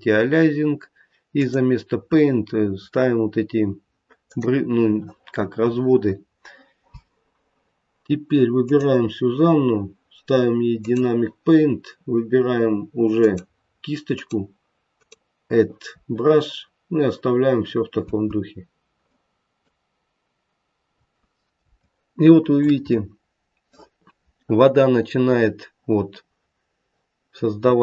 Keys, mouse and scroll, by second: 0.1-1.3 scroll down 1, 1.3 click, 8.5 click, 10.7 click, 13.1 click, 14.8 click, 16.5-17.8 scroll down 5, 18.0 space, 18.9 middle click, 20.9-21.5 scroll up 2, 21.7 shift+middle click, 22.8 middle click.